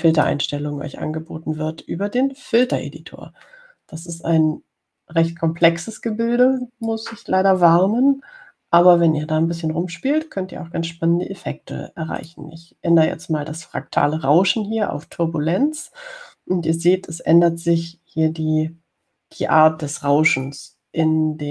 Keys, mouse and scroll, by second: 1.4 click, 3.8 click, 6.8-8.3 drag, 13.4 click, 16.3 click.